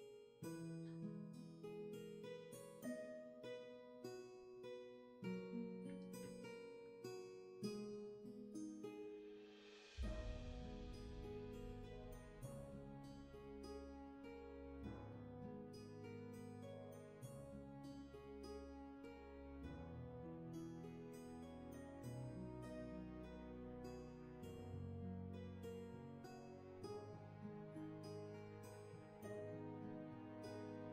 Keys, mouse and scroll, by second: 25.7 ctrl+z.